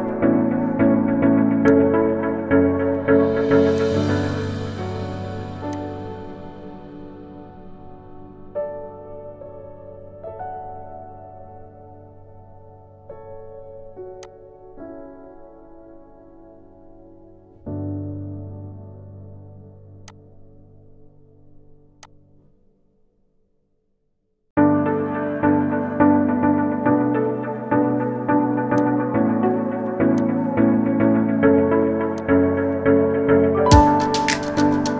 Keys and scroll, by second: 13.4 ctrl+z.